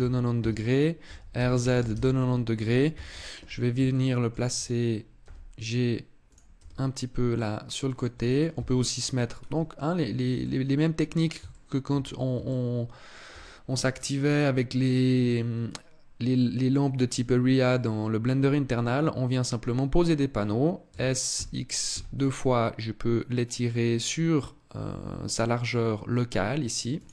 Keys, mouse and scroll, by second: 0.8 r, 2.6 KP_7, 3.6 shift+middle click, 5.0 g, 6.0 click, 6.3 r, 7.7 click, 8.3 KP_3, 9.1 scroll down 2, 10.2 middle click, 11.3 shift+middle click, 11.7-12.1 scroll up 3, 12.3 shift+middle click, 15.0 middle click, 17.4 middle click, 20.6 s, 26.8 click.